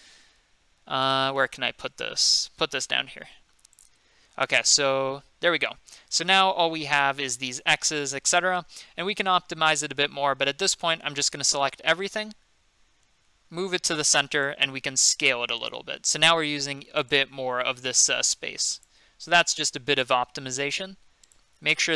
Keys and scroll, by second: 0.1 g, 2.4 g, 11.2 a, 13.2 g, 14.8 s, 18.0 g, 19.3 s.